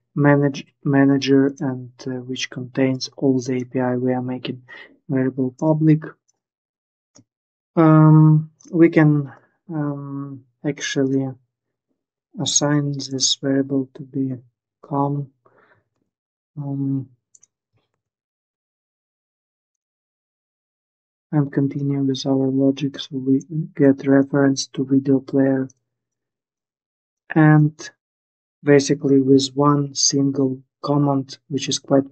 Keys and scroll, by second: 15.6 ctrl+s, 17.6 ctrl+s.